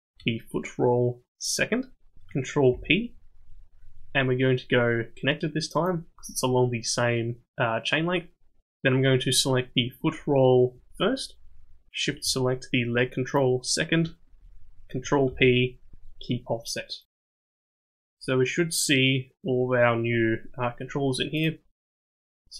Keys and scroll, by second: 2.7 ctrl+p, 15.2 ctrl+p.